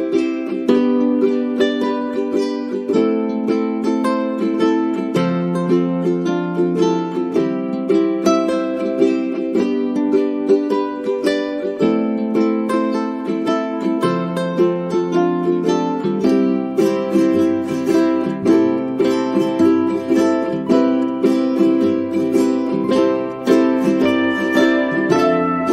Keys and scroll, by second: 20.1 ctrl+shift+Right, 21.8 ctrl+shift+Right, 22.8 ctrl+shift+Right.